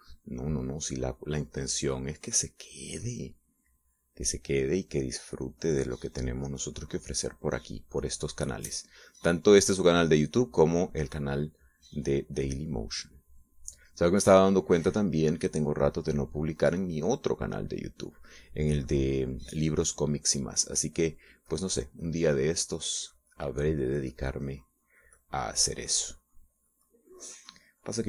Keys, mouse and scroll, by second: 1.7-3.9 drag, 5.5 middle click, 6.6-9.3 drag, 9.4 middle click, 10.2-12.5 drag, 12.9-17.1 drag, 17.2 click, 17.8-20.0 drag, 22.4 click, 22.7 click, 23.6-28.0 drag.